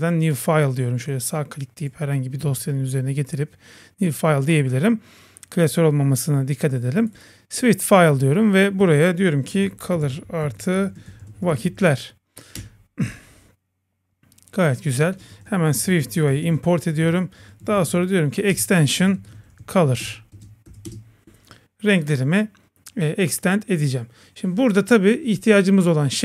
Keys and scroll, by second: 12.6 Return, 16.9 Return, 18.5 Return, 20.0 Return.